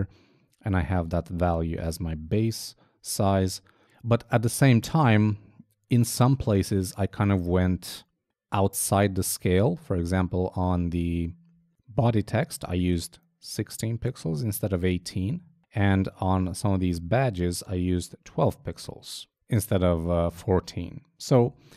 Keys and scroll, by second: 0.0 super+Tab, 5.3 super+Tab, 15.1 super+Tab, 18.9 super+Tab, 21.6 super+Tab.